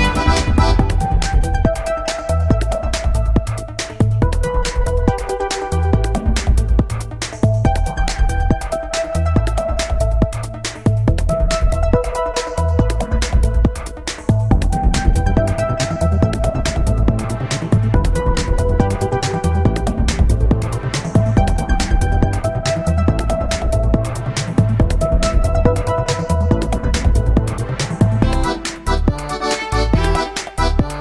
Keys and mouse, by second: 0.0-1.7 drag, 0.0 1, 1.2-3.7 middle drag, 3.3-6.1 drag, 6.2-9.0 middle drag, 7.9-9.8 right drag, 9.2-11.1 drag, 9.2 middle click, 12.0-13.1 right drag, 13.1 middle click, 13.9-14.9 drag, 16.2-19.7 drag, 16.9-18.9 right drag, 19.2-22.3 right drag, 21.6-24.1 drag, 23.4-24.5 middle drag, 25.1 KP_1, 29.9 middle click.